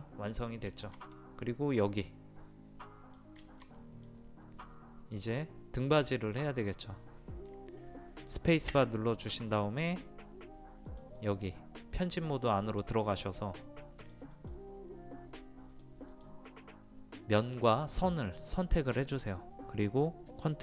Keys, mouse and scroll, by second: 0.8 shift+middle click, 3.5-7.3 shift+middle drag, 9.3 space, 10.9-12.3 drag.